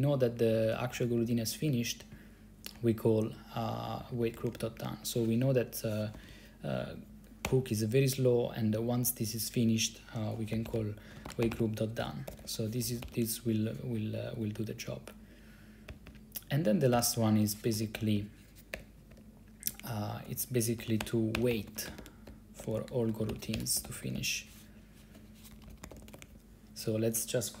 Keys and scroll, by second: 0.0 Down, 0.1 Down, 0.3 Down, 0.5 Down, 0.6 Down, 0.8 Down, 0.9 Down, 1.0 Down, 1.1 Down, 1.3 Down, 1.4 Down, 1.6 Down, 1.8 Down, 2.2 Right, 2.7 Right, 2.8 Right, 2.8 Right, 4.1 Right, 4.2 Right, 4.4 Right, 4.5 Right, 4.6 Right, 4.7 Right, 6.3 ctrl+c, 7.6 o, 10.2-13.7 typing, 16.0 Down, 16.2 Down, 17.1 i, 17.8 ctrl+c, 18.1 o, 18.3 Return, 18.8 BackSpace, 19.2 BackSpace, 19.8 Tab, 20.7-26.9 typing.